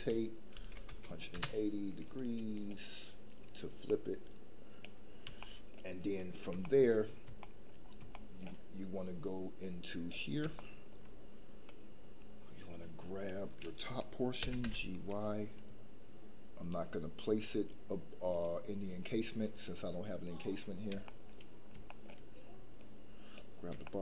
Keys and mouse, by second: 0.5 KP_1, 0.7 KP_8, 0.9 KP_0, 1.3 KP_Enter, 3.9 middle click, 5.4 shift+middle click, 6.7 shift+middle click, 7.4 shift+middle click, 8.3 shift+middle click, 9.6 click, 10.7 shift+middle click, 12.7 click, 14.4 g, 14.6 y, 18.3 click, 21.9 shift+middle click, 22.9 click, 23.9 shift+middle click.